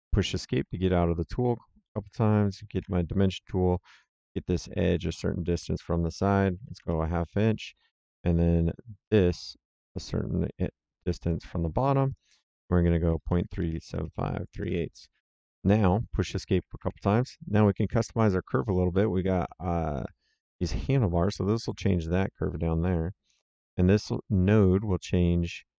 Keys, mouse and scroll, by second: 0.5 Escape, 1.8 middle click, 2.7 d, 3.8 click, 6.6 KP_5, 6.7 KP_Enter, 9.0 click, 11.1 click, 13.0 KP_Decimal, 13.3 KP_3, 13.5 KP_7, 13.6 KP_5, 13.9 Return, 16.5 Escape, 19.3 click, 24.4 click.